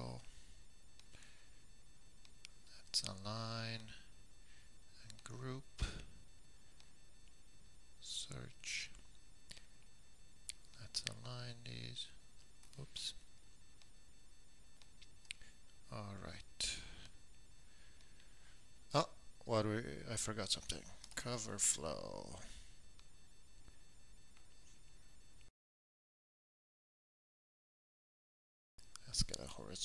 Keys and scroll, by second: 0.0-0.6 typing, 21.0-22.5 typing, 29.7-29.8 typing.